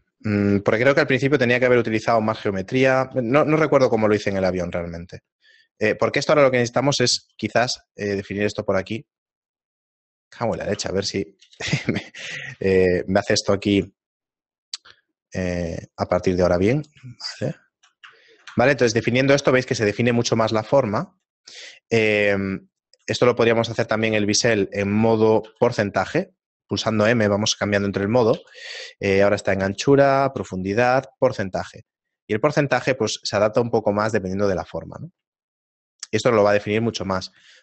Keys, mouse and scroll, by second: 2.5-3.4 scroll up 1, 3.4-5.7 scroll up 1, 5.7 ctrl+r, 7.2 ctrl+b, 10.4 click, 13.8 click, 15.6 click, 17.3 shift+middle click, 18.4 shift+middle click, 18.8 Tab, 20.4 Tab, 20.9 shift+middle click, 21.8 middle click, 23.1 shift+middle click, 23.6 ctrl+z, 23.9 ctrl+z, 25.5 ctrl+b, 35.5 shift+middle click, 37.1 ctrl+r.